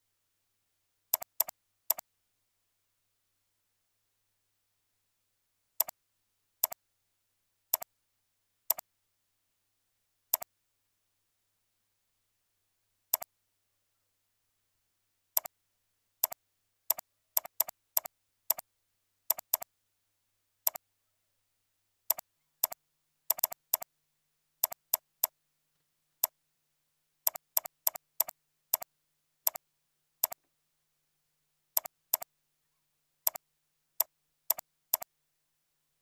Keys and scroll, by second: 28.8 ctrl+a, 31.1 ctrl+c, 32.1 ctrl+c, 33.8 ctrl+v, 34.1 ctrl+a.